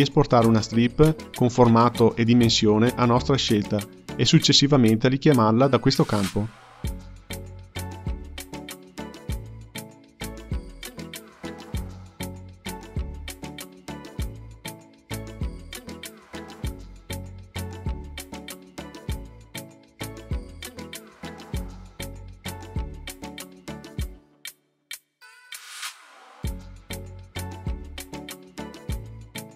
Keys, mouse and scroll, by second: 4.1-7.1 drag, 8.5-11.5 drag, 24.3-27.2 drag.